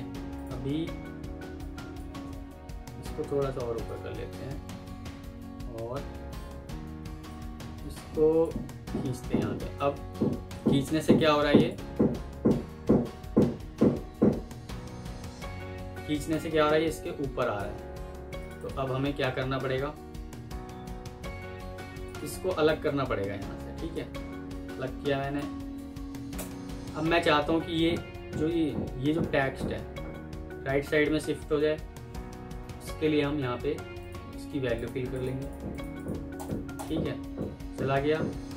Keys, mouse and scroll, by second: 1.1 F2, 18.5 double click, 24.3 ctrl+x, 24.3 typing, 26.2 BackSpace, 35.0 double click.